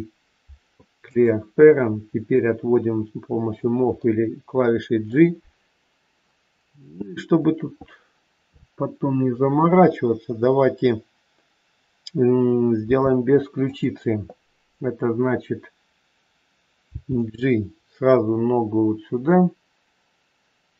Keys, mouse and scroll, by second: 2.3 click, 4.0 middle click, 12.8 r, 16.9 g.